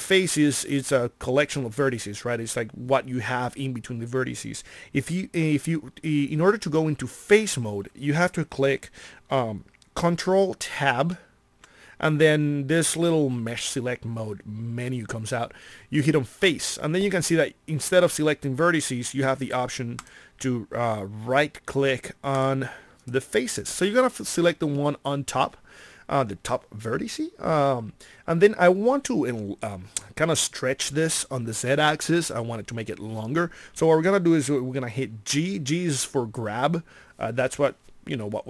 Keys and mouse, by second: 10.9 ctrl+Tab.